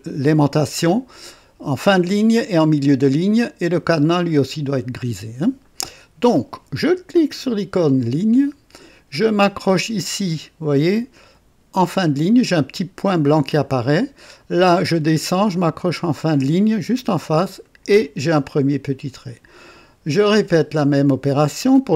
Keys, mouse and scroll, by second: 8.0 click, 13.4 click, 17.6 click, 20.2 click.